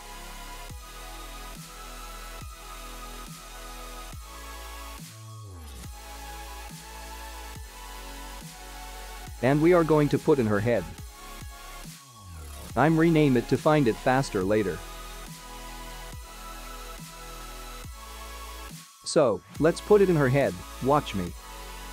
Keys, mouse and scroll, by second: 1.2 shift+a, 6.6-7.8 scroll down 7, 10.4 2, 12.8 F2, 15.2 l, 16.3 BackSpace, 16.4 BackSpace, 18.9 `, 20.5-20.9 scroll up 2, 20.9 g.